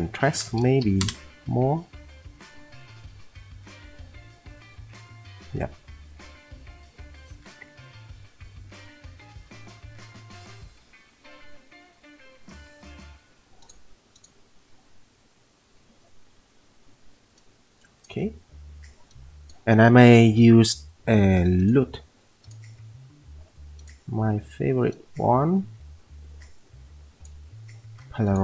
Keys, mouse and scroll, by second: 0.8 8, 1.0 click, 7.7 F10, 9.3 F10.